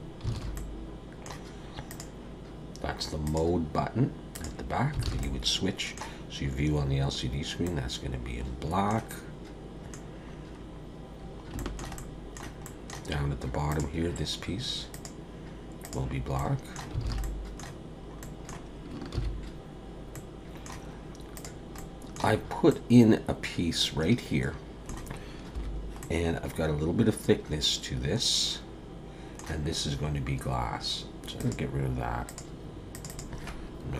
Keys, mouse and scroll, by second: 0.3 alt+a, 0.5 middle click, 1.9 click, 3.2 click, 5.0 alt+a, 5.2 middle click, 7.3-7.6 scroll down 1, 7.6 middle click, 9.1 middle click, 10.0-10.4 scroll down 1, 10.6-11.1 scroll up 2, 11.1-11.5 scroll down 3, 11.6 shift+middle click, 12.0 middle click, 12.6 middle click, 13.1-13.7 scroll up 2, 13.7 click, 14.9 click, 16.4 middle click, 17.0 alt+a, 17.2 middle click, 17.9-18.2 scroll down 1, 18.2 middle click, 19.7 ctrl+s, 20.1 middle click, 21.3 click, 21.8 middle click, 22.4-22.7 scroll up 3, 22.7 middle click, 25.5 /, 26.0 middle click, 31.4 click, 32.3 click, 32.9 click, 33.1 click.